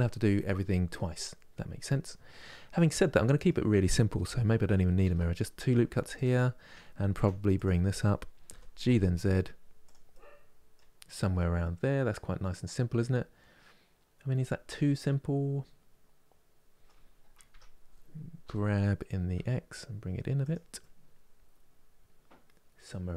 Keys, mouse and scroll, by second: 2.5-4.7 middle drag, 4.7 ctrl+r, 6.8 3, 7.2 click, 8.2 g, 9.8 middle click, 10.7-11.0 scroll down 1, 11.0-17.2 middle drag, 17.2 Tab, 18.1 g, 20.5-23.1 middle drag.